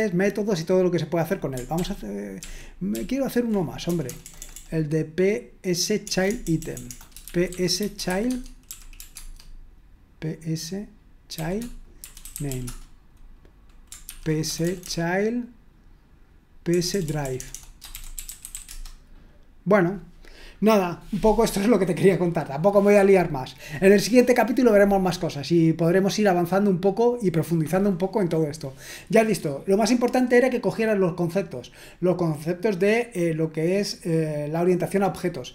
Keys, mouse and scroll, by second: 1.8 ctrl+p, 2.4 ctrl+p, 2.9 ctrl+p, 3.8 BackSpace, 4.1 BackSpace, 4.2 BackSpace, 4.4 BackSpace, 6.0-9.1 typing, 11.7-13.0 typing, 14.0 ctrl+p, 14.4 BackSpace, 14.6 BackSpace, 14.8 BackSpace, 16.7-19.0 typing.